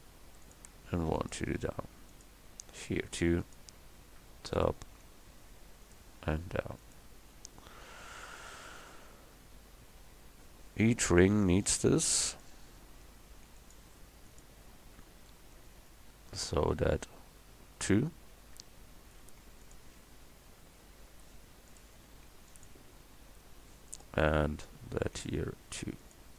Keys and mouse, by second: 0.9 ctrl+r, 3.1 ctrl+r, 5.0 ctrl+r, 8.0 middle click, 10.2 ctrl+r, 13.2 ctrl+r, 15.5 middle click, 19.2 ctrl+r, 22.3 ctrl+r, 25.0 ctrl+r.